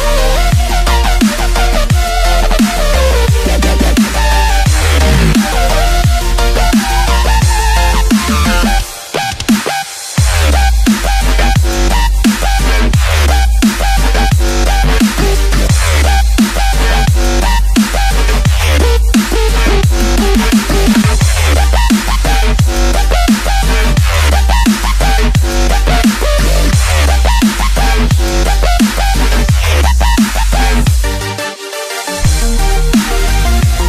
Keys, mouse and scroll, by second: 18.1 KP_7, 18.9-19.4 scroll up 3.